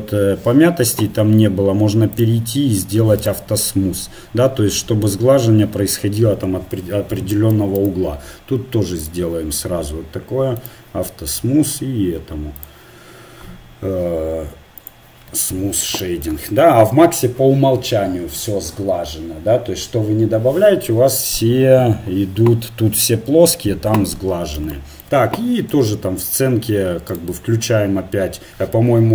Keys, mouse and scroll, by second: 2.2-5.6 drag, 6.1-7.5 middle drag, 9.0 click, 9.0-14.8 right drag, 11.3-14.5 drag, 16.0 click, 16.2 middle click, 25.8 g.